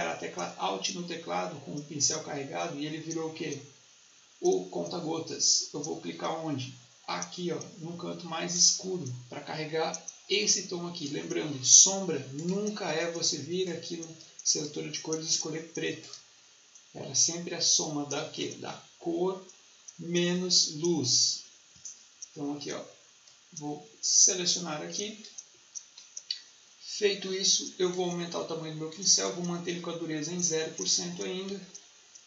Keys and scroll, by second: 31.3 Escape.